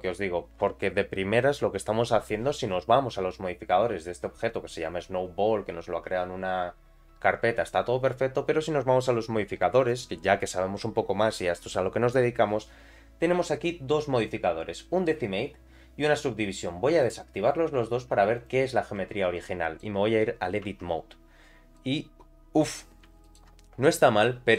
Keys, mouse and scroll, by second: 9.8 click, 17.0 click, 18.4 click, 19.3 middle click, 20.6 Tab, 21.1-21.7 scroll down 2, 21.7-22.8 middle drag, 23.2 alt+middle click, 23.7 scroll up 2, 24.2 middle click.